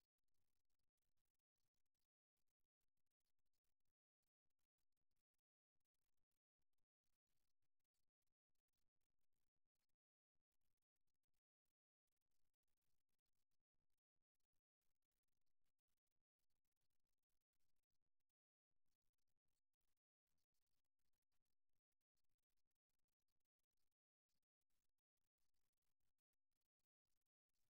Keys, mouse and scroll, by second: 4.9-6.0 right drag, 6.0 middle click, 7.8 KP_1, 12.2 g, 17.3 e, 20.1 e, 23.5-25.2 right drag, 25.5-27.7 right drag.